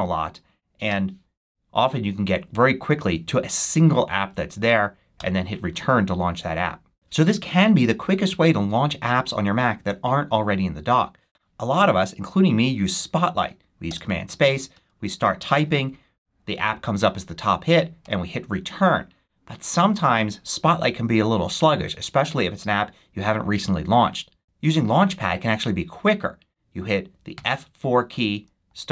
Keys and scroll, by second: 0.8 c, 5.1 Return, 14.4 super+c, 14.6 a, 17.9 Return, 19.7 super+q, 28.6 c.